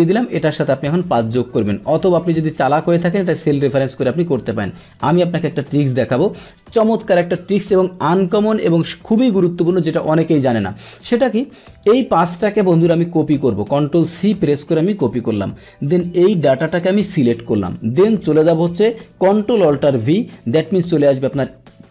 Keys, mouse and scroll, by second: 0.4 click, 6.3 click, 7.4 Delete, 10.4 click, 11.7 click, 13.3 ctrl+c, 14.9 click, 16.0 click, 20.0 ctrl+alt+v.